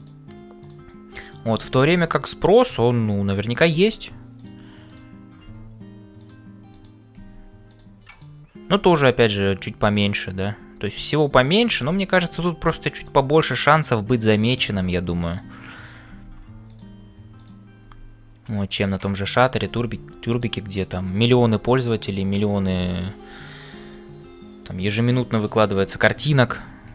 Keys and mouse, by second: 0.0-26.9 typing, 0.6 click, 6.7 click, 8.1 click, 13.5 click, 14.2 click, 24.8 middle click, 25.7 click.